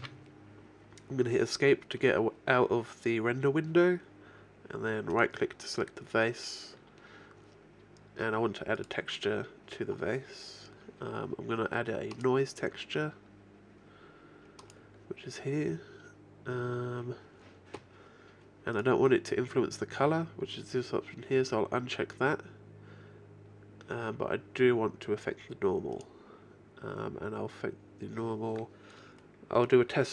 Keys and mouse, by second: 0.0 Escape, 5.2-7.0 right drag, 8.8-10.8 drag, 12.2-15.1 drag, 16.1-18.8 middle drag, 18.8-20.4 drag, 27.1-28.2 drag, 29.4 middle click.